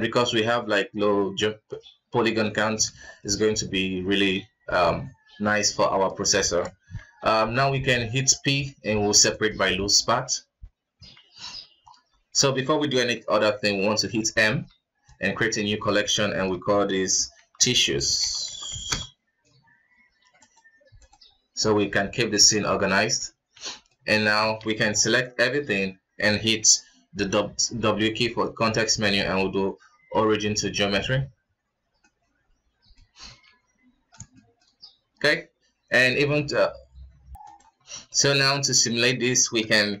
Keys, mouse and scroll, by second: 0.4-7.2 middle drag, 7.2 p, 11.1 Tab, 11.3 scroll down 2, 11.4 KP_1, 11.8-14.4 scroll up 3, 14.4 m, 18.0 s, 22.5 click, 23.5 alt+a, 23.6 middle click, 23.9 scroll down 4, 24.1 KP_1, 24.4 shift+z, 24.9 b, 27.2 w, 32.0-33.1 middle drag, 33.1-33.4 scroll up 3, 33.4 KP_1, 33.8-34.3 scroll up 3, 34.3-35.0 shift+middle drag, 35.0-35.7 scroll down 2, 35.7-37.7 scroll up 2, 37.7-38.1 scroll down 5, 38.1 middle click, 38.3 KP_1, 38.5-38.9 scroll up 2, 38.9-40.0 scroll down 3.